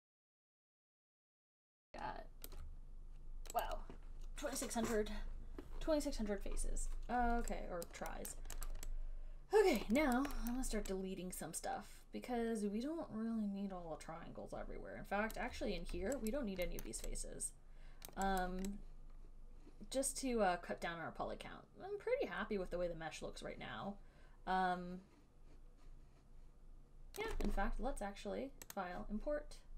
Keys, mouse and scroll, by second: 0.1 click, 0.4 click, 0.6 alt+click, 0.6 alt+right click, 0.7 alt+right click, 0.8 click, 1.0 shift+click, 1.2 click, 1.4 alt+click, 1.4 alt+right click, 1.4 alt+click, 1.7 click, 1.8 right click, 1.9 alt+click, 2.7 alt+right click, 3.9 alt+click, 8.2 alt+right click, 8.6 alt+middle click, 9.0 alt+right click, 10.0 alt+click, 10.5 alt+right click, 10.8 alt+middle click, 15.7 alt+click, 16.5 alt+right click, 17.1 alt+middle click, 18.3 alt+click, 18.6 alt+right click, 27.4 alt+click, 29.0 click.